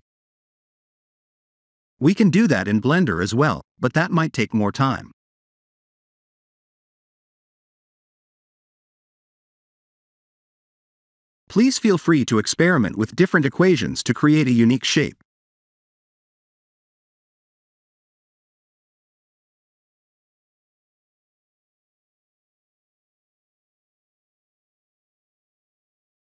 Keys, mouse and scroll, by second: 0.9 Left, 1.0 Left, 10.8 click, 14.6 click, 17.3 click, 20.4 click, 22.0 BackSpace, 25.3 click.